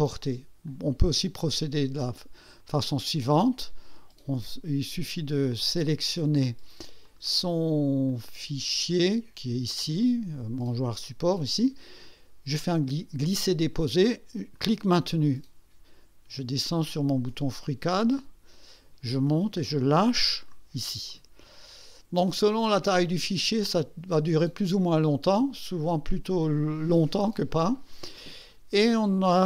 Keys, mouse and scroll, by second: 0.7 click, 2.6 click, 7.0 click, 8.1 click, 14.5-20.7 drag.